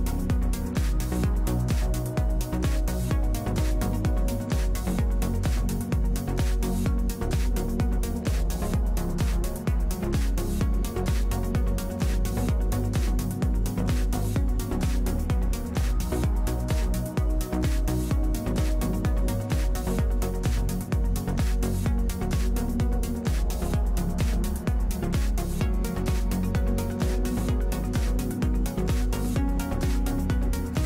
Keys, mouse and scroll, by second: 0.1 f, 10.7-12.6 drag, 12.6 middle click, 14.2-26.0 drag, 26.0-28.1 middle drag.